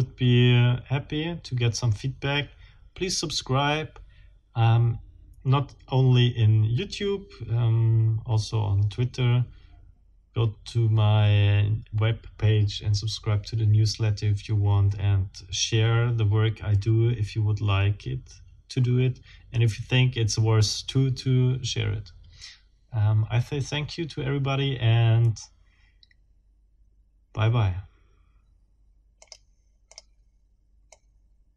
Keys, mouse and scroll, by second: 29.2 click, 29.9 middle click, 30.9 middle click.